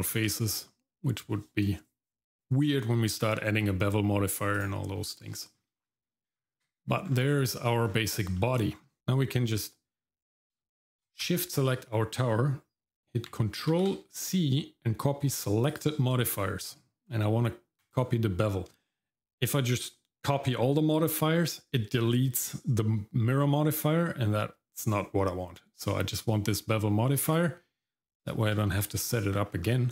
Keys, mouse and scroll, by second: 0.0 scroll down 1, 0.4 shift+middle click, 4.5 click, 5.4 shift+middle click, 5.8 middle click, 6.4 Tab, 7.1 scroll down 2, 7.4 shift+middle click, 7.8-8.3 scroll up 2, 8.4 shift+middle click, 8.7 middle click, 9.0 ctrl+c, 11.2 shift+click, 13.7 ctrl+c, 28.3 shift+middle click, 28.7 middle click, 29.0 scroll up 1, 29.3 middle click, 29.6-29.9 scroll up 1.